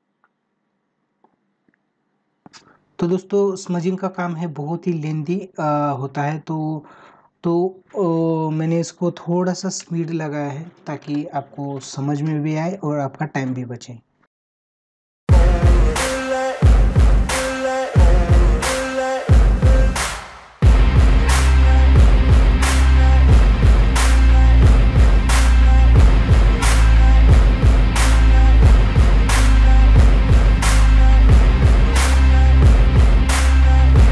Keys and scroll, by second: 0.8 ], 7.4 space, 7.9 space, 8.1 ctrl+=, 13.4 space, 17.7 space, 20.6 ctrl+-, 21.2 space.